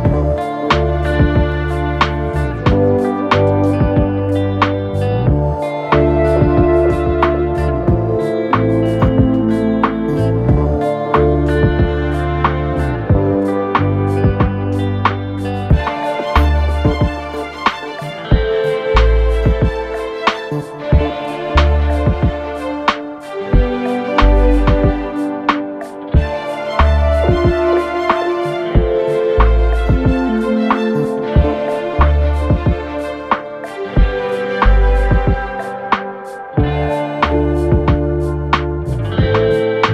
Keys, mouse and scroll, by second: 16.0 ctrl+z, 16.9 click, 21.4-38.1 drag.